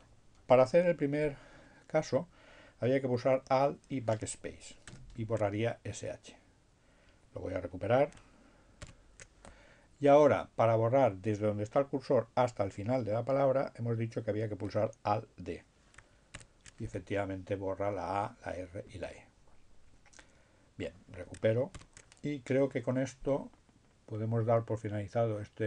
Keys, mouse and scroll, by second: 1.5 alt+BackSpace, 8.7 ctrl+y, 14.6 alt+d, 19.4 ctrl+y.